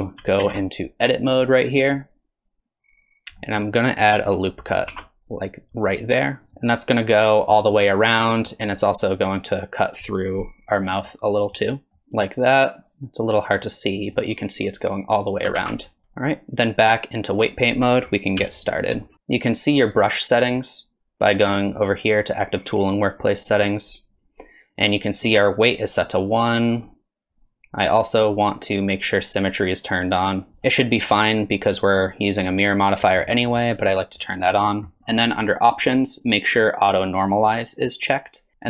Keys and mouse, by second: 0.4 ctrl+Tab, 3.4 click, 4.9 ctrl+r, 6.5 alt+z, 6.5 click, 7.9 click, 8.8 click, 11.5 middle click, 12.0 alt+z, 12.0-14.1 middle drag, 15.6 alt+z, 16.0 ctrl+Tab, 18.4 KP_3, 23.3 click, 29.6 click, 31.0 middle click, 32.6 middle click.